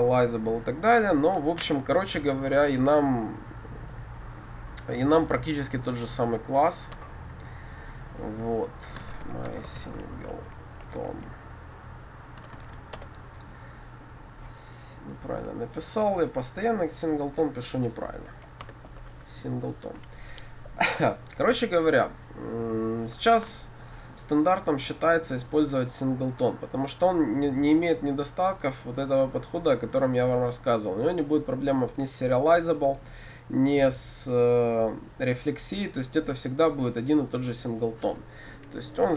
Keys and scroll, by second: 7.0 Return.